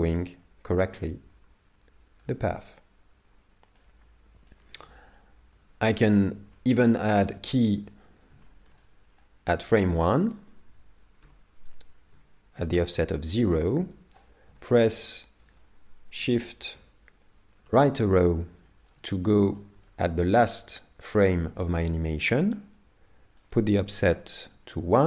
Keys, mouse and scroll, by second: 1.0 click, 4.5 click, 6.6 shift+middle click, 6.9 middle click, 8.4 shift+middle click, 11.2 i, 16.8 shift+Right, 18.3-18.7 scroll down 3, 18.7 shift+middle click, 19.3 middle click, 19.9 shift+middle click, 21.9 middle click, 23.4 click.